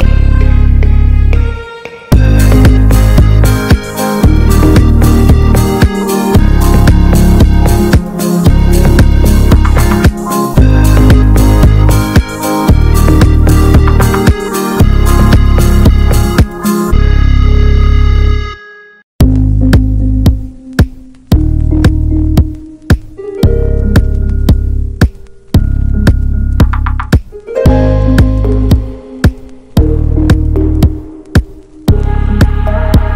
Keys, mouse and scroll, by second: 0.0-1.4 drag, 1.4 middle click, 1.6-3.4 drag, 5.6-8.0 drag, 8.0-9.7 middle drag, 9.7 click, 10.0 shift+a, 11.7 shift+a, 13.1 shift+d, 14.0-15.9 drag, 16.4-16.9 scroll up 3, 16.9-23.6 drag, 23.6 a, 24.7 click, 25.3 shift+click, 25.9 ctrl+l, 27.5 scroll down 7, 27.8-29.0 scroll up 4, 28.5 middle click, 29.0-30.9 drag, 30.9-31.3 scroll down 3, 31.3-31.7 scroll up 1, 31.7-33.1 drag.